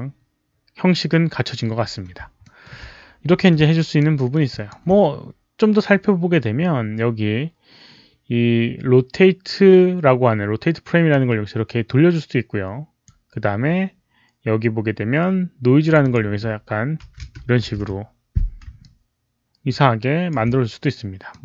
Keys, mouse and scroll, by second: 2.3 alt+middle click, 3.7 alt+right click, 4.0 alt+middle click, 4.4 alt+click, 8.4 alt+click, 8.4 alt+middle click, 8.4 alt+right click, 11.0-12.9 alt+drag, 11.7 alt+middle click, 11.7 alt+right click, 12.9 alt+middle click, 12.9 alt+right click, 14.4 alt+click, 14.4 alt+middle click, 15.7 click, 15.9 click, 16.6 click, 16.9 KP_1, 17.1 Return, 17.4 Tab, 17.6 KP_1, 18.7-20.2 alt+drag, 19.7 Tab, 21.2 alt+click.